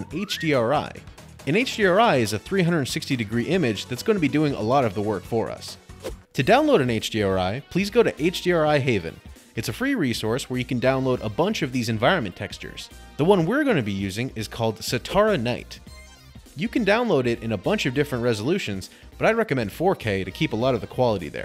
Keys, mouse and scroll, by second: 10.1 click, 10.9-11.7 scroll down 10, 11.7-12.6 scroll up 11, 12.6 click, 13.4-13.9 scroll down 4, 13.9-14.9 scroll, 15.8 click, 17.1-17.8 scroll, 20.3 click.